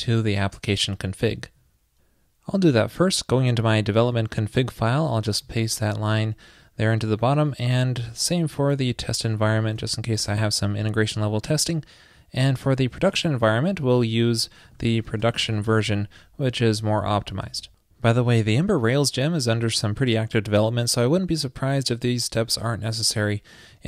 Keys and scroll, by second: 1.5 super+c, 5.4 super+v, 7.3 super+s, 8.6 super+Down, 9.5 super+v, 9.7 super+s, 13.2 super+l, 14.0 super+v, 14.8 alt+shift+Left, 17.4 super+s.